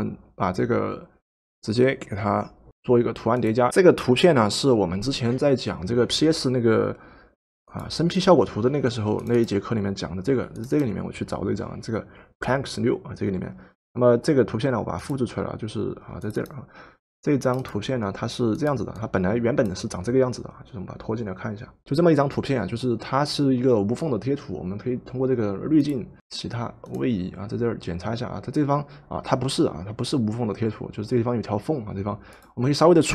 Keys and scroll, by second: 26.2 Escape.